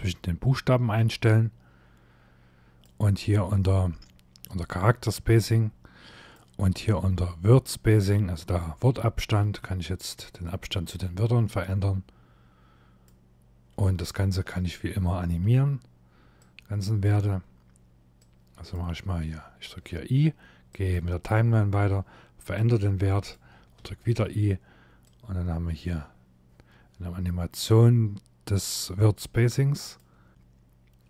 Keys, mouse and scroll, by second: 5.1 click, 9.0 click, 16.1 click, 17.9 click, 20.4 click, 23.5 i, 24.7 click.